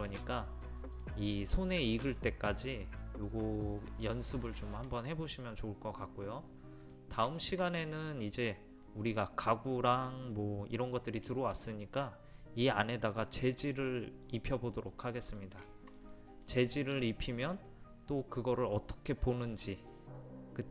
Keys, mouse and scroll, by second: 3.3-3.8 scroll up 1, 3.8 middle click, 4.7-11.1 shift+middle drag, 12.7 click, 14.8-20.7 middle drag.